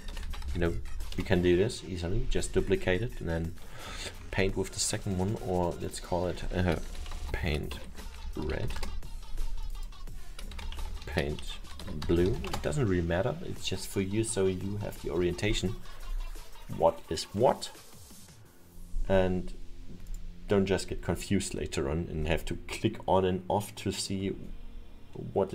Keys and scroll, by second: 0.0-1.5 typing, 2.8 Return, 6.7-9.0 typing, 10.6 p, 11.0 n, 11.5 shift+-, 11.9 shift+b, 12.5 Return.